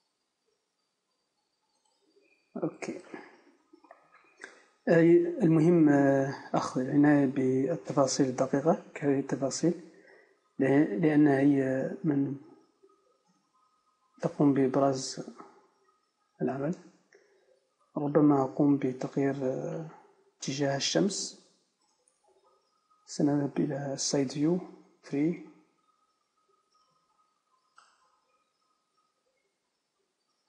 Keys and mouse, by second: 1.9 click, 2.1-3.5 drag, 3.5 KP_0, 5.2 z, 6.5 z, 8.0 alt+h, 9.5-11.6 typing, 13.1 a, 13.2-15.2 middle drag, 13.3 a, 17.8-19.6 right drag, 18.9 KP_1, 25.3 KP_3, 28.9 r.